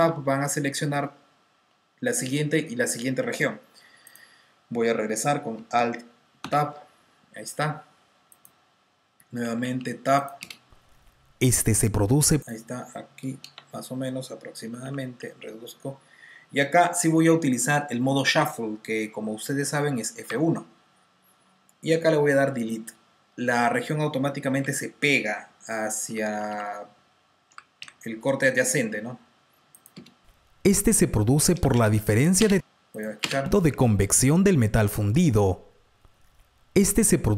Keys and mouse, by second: 1.3-2.6 typing, 3.9 click, 5.9 alt+click, 9.3 Tab, 9.3 click, 9.3 t, 9.5 t, 10.7 click, 12.0 space, 12.5 click, 12.8 click, 12.8 space, 13.1 click, 13.1 space, 14.6 r, 14.8 r, 21.6 F1, 22.5 Delete, 25.1 F2, 26.0-26.9 typing, 28.0 typing, 29.8 click, 30.8-33.1 typing, 32.9 click, 34.7 click, 35.4 typing.